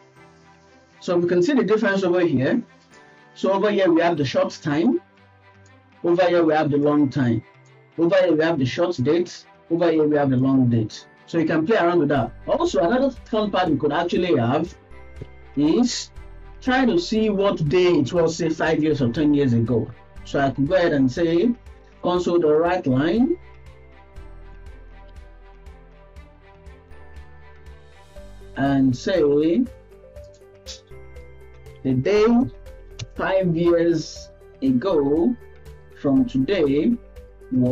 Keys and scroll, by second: 22.1 BackSpace, 23.3 Return, 26.2 Right, 26.6 Right.